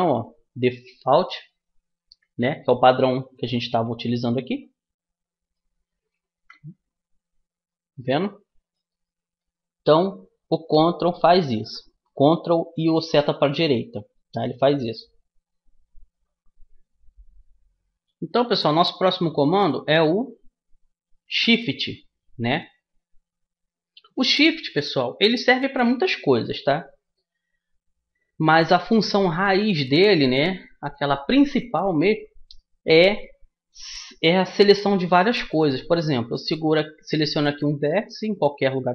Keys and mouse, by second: 3.0 middle click, 3.6-5.0 middle drag, 6.5 KP_1, 13.7-16.4 middle drag, 19.4-21.4 middle drag, 25.9-33.7 middle drag, 38.7-38.9 right drag.